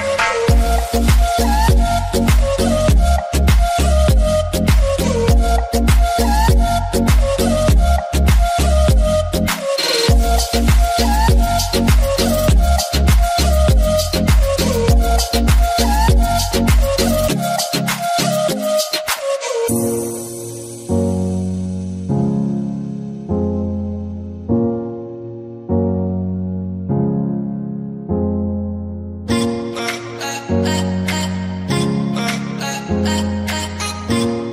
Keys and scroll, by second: 0.9 typing, 2.0-2.7 typing, 5.3-6.2 typing, 27.2-28.1 typing, 31.5 Return.